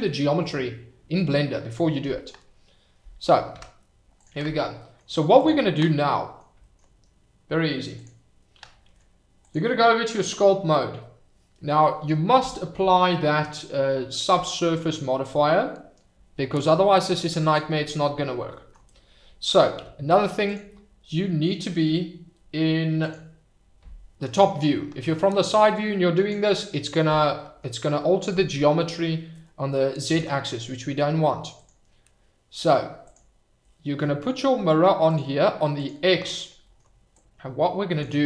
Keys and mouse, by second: 3.5 KP_Divide, 4.1 click, 4.8 middle drag, 5.9-6.3 middle drag, 8.0 click, 9.5-11.2 drag, 17.4 click, 19.8 f, 23.0 click, 24.7 middle click, 25.4-26.4 drag, 26.5 middle click, 27.3 middle click, 30.3 ctrl+z, 33.0 click, 35.0 click, 35.7 click, 37.3 click.